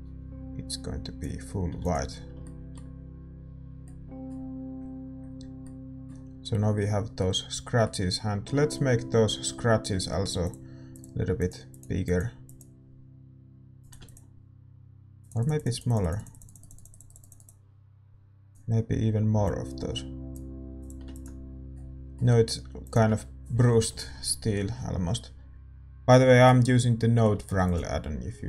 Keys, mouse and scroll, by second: 25.6 click, 26.9 middle click, 27.6 ctrl+s.